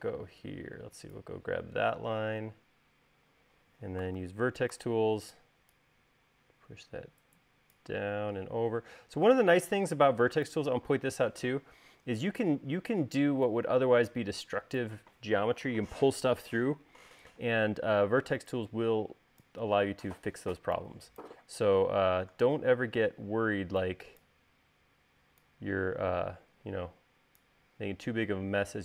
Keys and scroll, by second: 5.1 v.